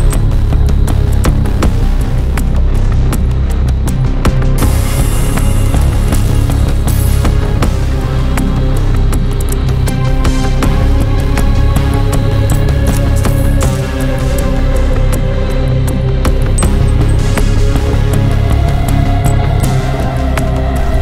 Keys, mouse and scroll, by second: 0.6 scroll down 1, 1.3 scroll up 2, 1.8 scroll down 2, 3.1 click, 4.0 right click, 5.4 click, 6.4 click, 8.6 click, 9.9 click, 11.5 click, 11.9 click, 13.2 scroll up 1, 14.1 scroll down 1, 14.9 scroll up 1, 16.5 scroll down 2, 17.2 scroll up 2, 18.1 scroll down 2, 19.2 0.